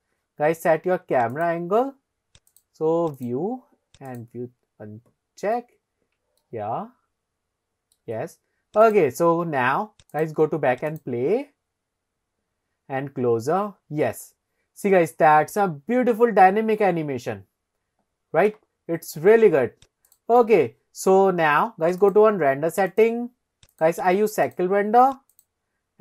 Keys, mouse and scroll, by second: 1.3 click, 2.5 click, 3.2 click, 4.1 click, 4.9-5.8 scroll down 1, 6.1 scroll down 1, 6.5 shift+middle click, 8.9 click, 10.1 click, 10.9 click, 12.1-12.5 scroll up 3, 20.3 click, 22.0 click, 22.9-24.4 drag, 24.8 click.